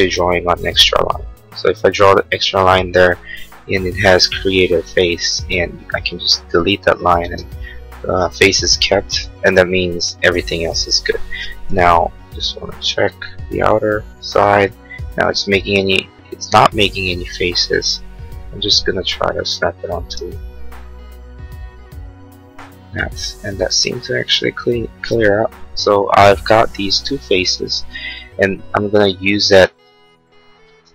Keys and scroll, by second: 1.9 space, 5.3 e, 7.2 space, 12.1 l, 14.9 Escape, 19.9 space, 20.3 e, 23.6 space.